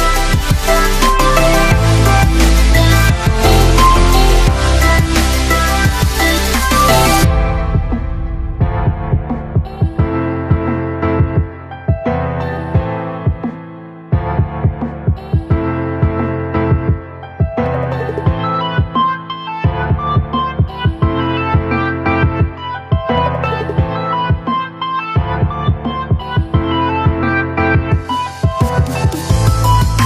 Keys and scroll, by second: 0.9 Up, 4.9 ctrl+v, 8.4 ctrl+x, 25.2 ctrl+a.